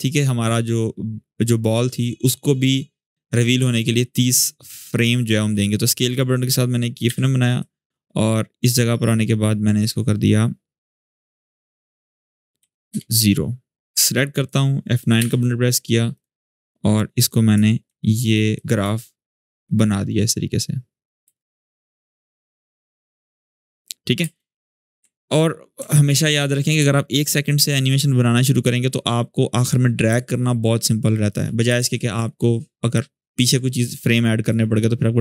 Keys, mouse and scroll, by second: 3.3 s, 4.9 click, 6.8 u, 7.3-8.6 drag, 12.3 0, 12.6 Return, 13.7-14.3 click, 14.9 F9, 15.9 click, 17.7 alt+scroll up 1, 18.3-20.9 drag, 21.0 space, 24.2 space, 24.5 click, 24.9-26.3 alt+scroll down 4, 26.3-28.2 drag, 28.2 click, 28.5 shift+click, 29.4-31.2 drag, 31.5 ctrl+z, 34.5-35.2 drag.